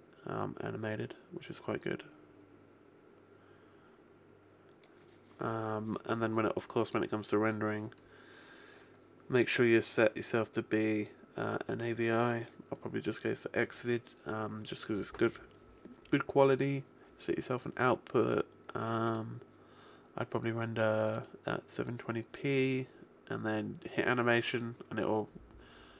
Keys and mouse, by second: 6.7 click, 8.5-9.7 middle drag, 9.7 click, 18.5 middle click, 19.0 click, 25.9 click.